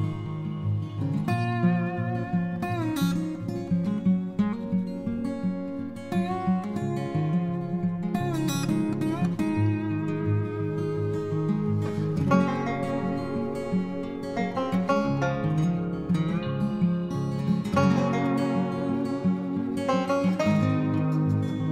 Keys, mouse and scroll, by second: 10.1-10.5 typing.